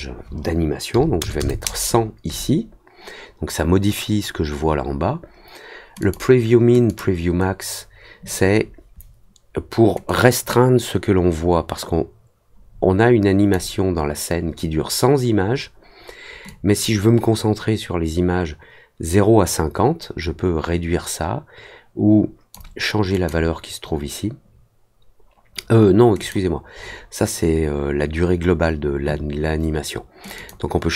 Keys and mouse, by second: 5.9 click, 6.8 click, 10.0-13.5 drag, 16.4-22.5 drag, 23.1 click, 26.1 click, 30.3 click.